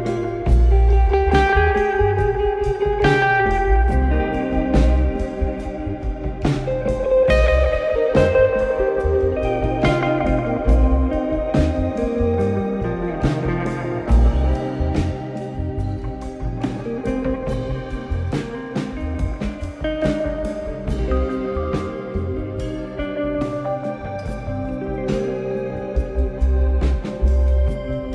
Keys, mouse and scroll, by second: 0.2-0.6 scroll down 1, 1.0 ctrl+z, 2.0 shift+click, 2.8 ctrl+z, 3.9 click, 5.3 shift+click, 7.1 KP_7, 7.7-8.6 scroll down 1, 8.6 shift+d, 12.6 click, 15.6 click, 17.3 click, 18.4 click, 20.1 KP_1, 21.0 ctrl+KP_1, 21.9 ctrl+KP_3, 23.1-24.7 scroll up 1, 24.7 click, 25.2 click, 25.7 shift+a.